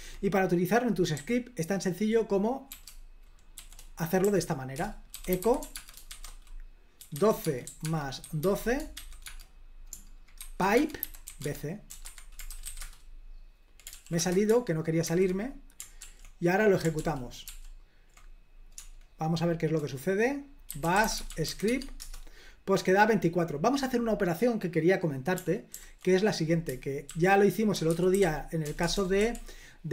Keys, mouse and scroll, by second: 1.2-9.4 typing, 4.9 Return, 10.5-13.2 typing, 12.1 Escape, 14.0 ctrl+p, 14.3 Return, 15.2 super+h, 16.1 ctrl+p, 17.1 ctrl+p, 17.5 ctrl+p, 18.9-22.1 typing, 22.1 Return, 25.8 ctrl+p, 27.2 ctrl+a, 27.6-29.3 typing.